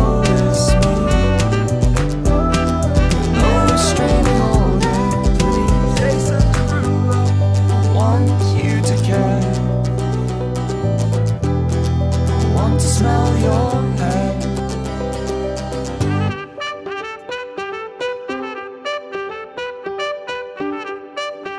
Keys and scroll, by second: 8.8 space.